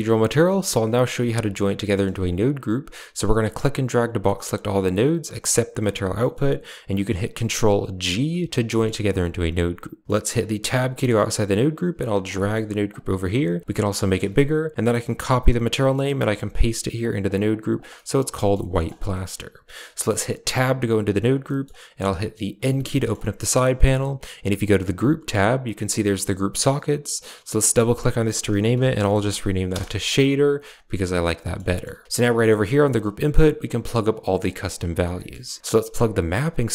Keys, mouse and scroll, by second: 1.7 middle click, 2.1 click, 3.2-5.2 drag, 6.0 middle click, 7.9 ctrl+g, 8.6 middle click, 10.5 Tab, 10.8 middle click, 11.7 g, 12.2 middle click, 13.1 g, 13.6 click, 14.0 click, 14.8-15.6 ctrl+drag, 15.8-16.2 ctrl+drag, 16.9 click, 17.3 click, 17.8 middle click, 18.2 middle click, 18.5 middle drag, 19.0 middle click, 19.8 middle click, 20.3 Tab, 21.3 middle click, 22.5 n, 22.8 middle click, 24.8 click, 27.4-29.6 drag, 31.3 middle click, 31.5 middle drag, 31.8 a, 32.0 click, 32.2 middle click, 32.4 g, 33.8 g, 34.2 middle drag, 35.0 middle click, 35.6 click, 36.5-36.7 drag.